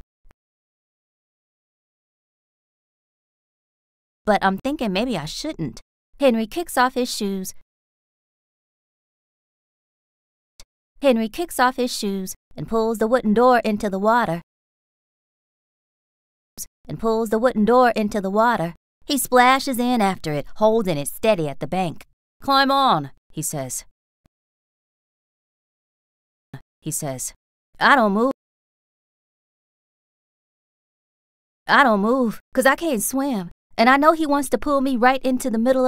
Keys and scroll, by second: 0.2 space, 0.7 s, 3.0 BackSpace, 3.6 space, 5.6 r, 8.3 s, 10.5 space, 11.9-14.7 typing, 16.4 space, 16.8 r, 19.4 a, 24.2 space, 24.9 s, 26.4 space, 26.8 r, 28.2 space, 29.5 BackSpace, 31.3 space, 33.4 a.